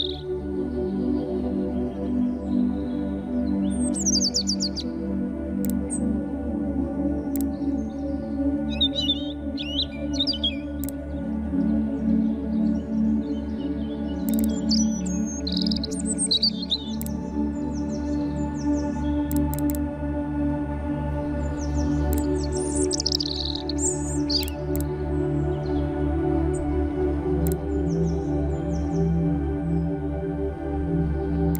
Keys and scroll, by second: 2.0 v, 9.8 ..